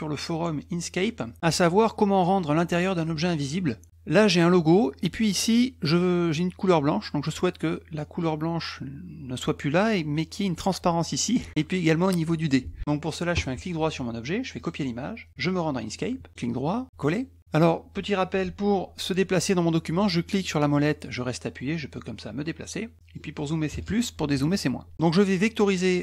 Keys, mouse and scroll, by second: 3.4 middle click, 3.4-3.9 scroll down 4, 13.3 right click, 14.6 click, 15.8 click, 17.0 click, 20.4-23.1 middle drag.